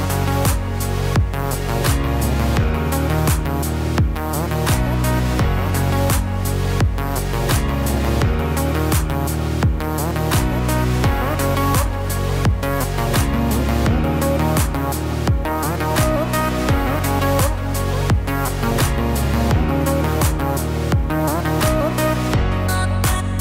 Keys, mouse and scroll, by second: 1.4 Tab, 5.6-6.1 scroll down 3, 6.1 middle click, 7.3-7.8 scroll up 2, 8.5 scroll down 1, 8.6 scroll down 1, 9.6 scroll up 2, 10.2 shift+middle click, 11.1-12.8 scroll up 2, 13.0 click, 15.2 KP_1, 15.9-17.5 scroll down 1, 17.5-18.3 scroll down 1, 17.5 g, 19.1 Tab, 19.8 middle click, 21.6-22.0 scroll up 2, 22.0 middle click.